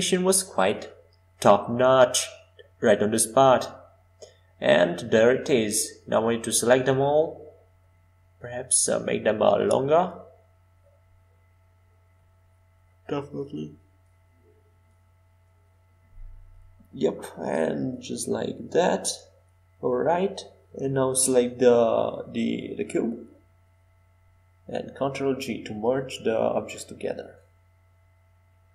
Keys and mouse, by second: 3.2 shift+d, 11.9-14.3 middle drag, 16.5 shift+click, 17.5 shift+middle click, 20.7 ctrl+j, 27.2-28.7 drag.